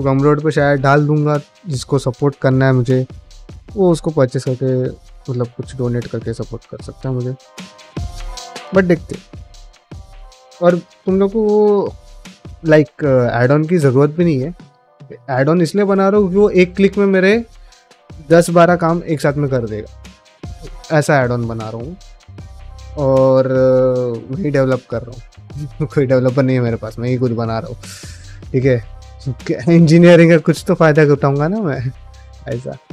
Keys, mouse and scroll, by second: 20.1 middle click, 21.9 middle click, 27.8 middle click.